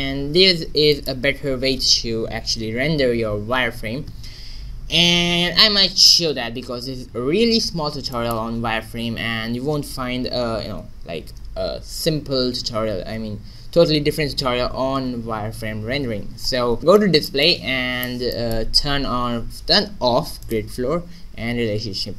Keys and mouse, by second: 0.0 Escape, 0.9-3.1 middle drag, 8.1-10.7 middle drag, 10.7 n, 16.1-18.8 middle drag, 20.3 middle click.